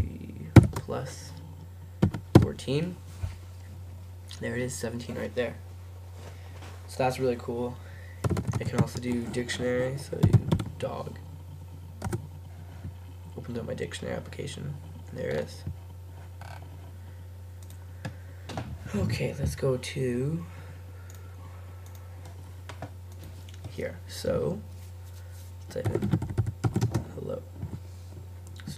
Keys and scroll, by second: 0.6 shift+=, 3.3-4.1 typing, 10.1-11.2 typing, 12.1 Return, 25.7-27.6 typing.